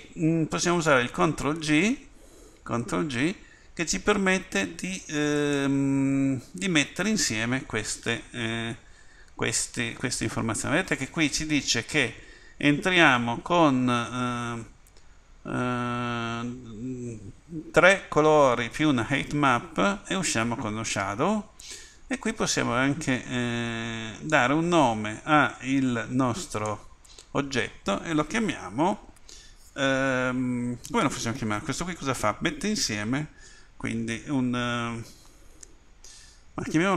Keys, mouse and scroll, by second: 1.5 ctrl+g.